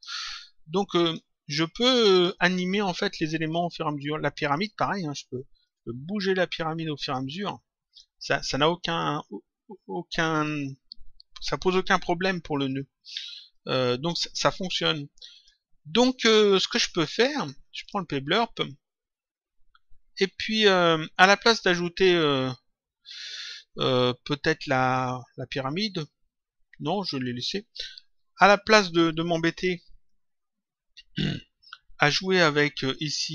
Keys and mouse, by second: 0.9 click, 4.5 click, 5.6 click, 8.8 click, 13.5 click, 15.3 click, 17.7 click, 30.0 click.